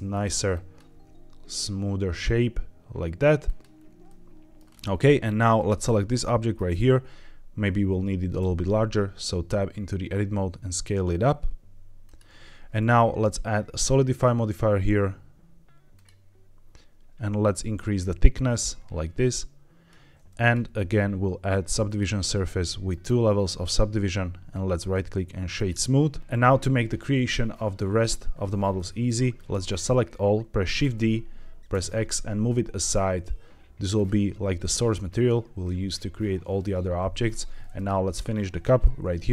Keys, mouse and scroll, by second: 0.0 click, 0.4 click, 0.8 g, 3.4 click, 4.0 middle click, 4.6 scroll down 2, 4.8 Tab, 5.5 click, 6.0-6.5 middle drag, 7.0 Tab, 8.3 s, 12.0 click, 12.2 Tab, 13.1-16.0 drag, 17.3-19.8 shift+drag, 20.3 click, 20.7-21.9 drag, 23.4 click, 24.7-25.6 right drag, 27.1-28.7 scroll down 2, 28.7-29.0 middle drag, 29.3-29.7 drag, 30.7 shift+d, 31.6 x, 33.9 click, 37.7 click.